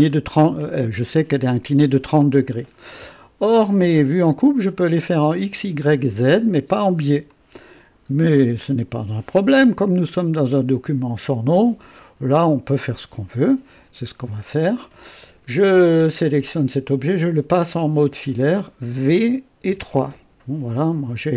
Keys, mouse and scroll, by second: 0.0-0.8 drag, 1.9-3.1 drag, 3.8-5.1 drag, 7.3-8.3 drag, 11.8-12.3 right drag, 12.7 click, 13.7 KP_3, 19.0 v, 19.6 v.